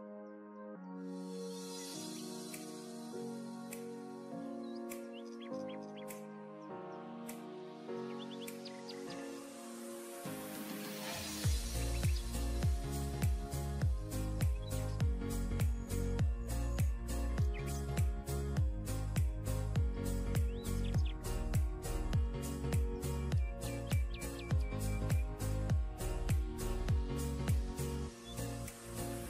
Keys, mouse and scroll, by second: 0.2-0.6 alt+scroll down 1, 1.2-1.7 alt+scroll down 1, 1.8 alt+scroll down 1, 2.4-2.7 alt+scroll up 1, 3.3 scroll down 1, 3.6-4.1 alt+scroll up 2, 4.1-4.6 alt+scroll down 1, 5.6 ctrl+click, 6.4 ctrl+e, 8.1 double click, 10.8 double click, 13.6 alt+scroll down 1, 13.9 alt+scroll up 1, 14.4 alt+scroll up 1, 14.5 alt+scroll down 1, 20.1-20.5 ], 23.6-24.0 alt+scroll up 1, 24.5 alt+click, 26.3 alt+click, 26.6 scroll down 1, 28.3-28.8 alt+scroll up 1.